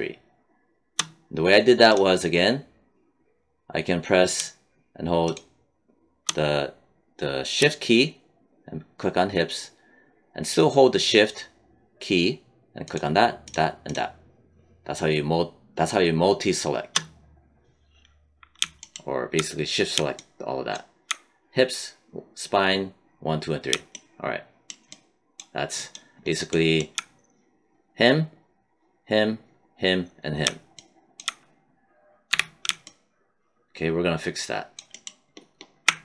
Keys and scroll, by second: 32.2 q.